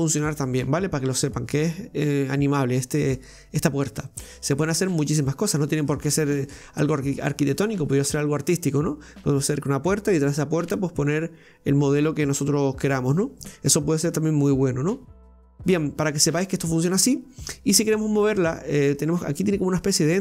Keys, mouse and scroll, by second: 4.2-7.2 middle drag, 15.8-18.4 scroll, 18.4 right click.